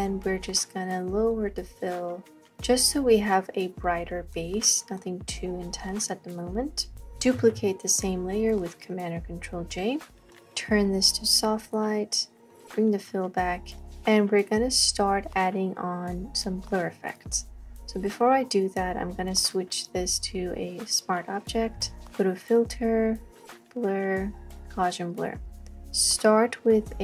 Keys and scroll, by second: 7.4 j.